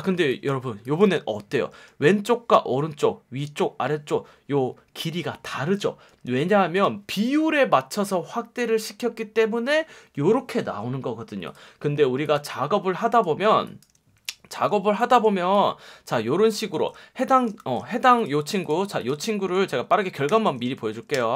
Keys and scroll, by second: 1.8 F1, 6.0 F1, 13.5 space, 14.7 space, 16.7 super+z, 17.6 shift+super+z, 20.3 alt+super+o, 21.1 Return.